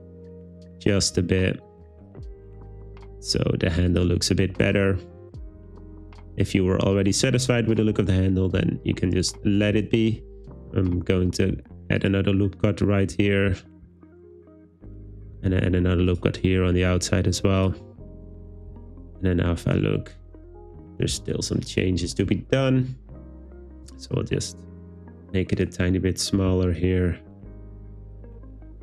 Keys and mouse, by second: 0.2 click, 0.7 click, 1.1 g, 2.0 click, 3.4 g, 5.6 g, 6.5 click, 7.1 click, 8.0 g, 9.6 click, 10.4 super+e, 11.6 super+r, 12.1 click, 13.1 Escape, 13.7 super+r, 14.1 click, 15.1 click, 15.5 super+r, 17.8 Tab, 18.7 z, 21.2 Tab, 22.1 z, 23.9 g, 25.7 click, 26.4 g, 27.7 click.